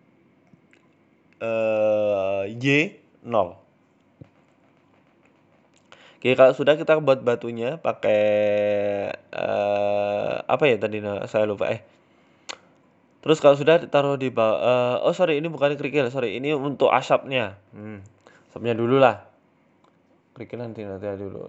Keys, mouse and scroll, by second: 0.0 middle click, 0.3 scroll down 2, 0.4 middle click, 1.0 shift+middle click, 1.9 scroll down 2, 2.1 middle click, 2.4 scroll up 2, 2.6 middle click, 2.9 shift+a, 4.4 shift+a, 7.2 KP_7, 7.7 s, 8.6 g, 9.3 middle click, 9.6 scroll up 2, 10.0 g, 11.4-11.8 scroll down 14, 11.8-12.4 scroll up 2, 12.4 g, 14.0-14.6 scroll up 11, 14.6 shift+middle click, 14.8 scroll down 3, 15.0 middle click, 15.4 KP_7, 17.0 s, 17.6 middle click, 18.0-18.5 scroll down 3, 18.2 middle click, 19.3 click.